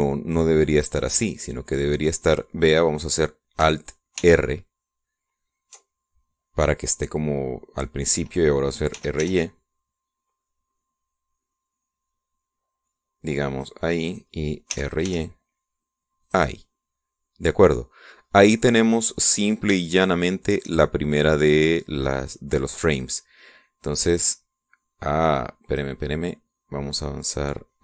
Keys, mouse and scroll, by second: 5.0 alt+r, 9.8 r, 10.1 y, 14.4 click, 14.9 right click, 15.6 r, 16.0 y, 17.1 click, 19.1-19.4 scroll up 1, 19.4-20.1 scroll down 2, 20.7 shift+click, 26.6 click.